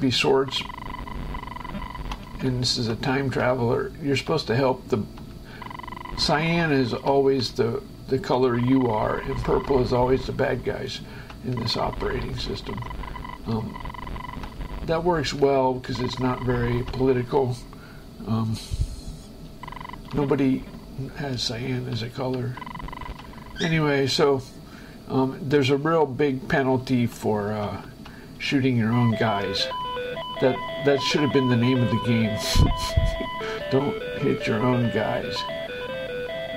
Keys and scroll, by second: 0.7 space, 2.7 Right, 3.7 Left, 4.7 Right, 5.7 Left, 5.9 space, 7.4 Left, 8.7 Right, 8.9 space, 10.8 Right, 11.9 space, 12.7 Left, 12.9 space, 13.8 Right, 14.2 space, 15.6 Left, 16.2 space, 19.7 Left, 19.9 space, 21.8 Left, 22.9 space, 25.9 shift+Escape, 27.1 Right, 28.6 space.